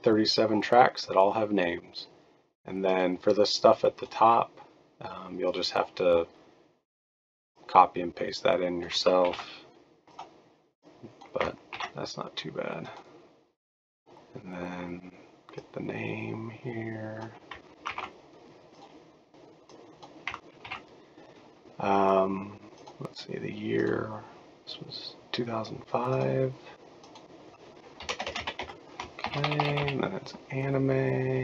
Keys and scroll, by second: 9.3 ctrl+c, 11.7 ctrl+v, 17.9 ctrl+c, 20.6 ctrl+v, 28.0-30.3 typing.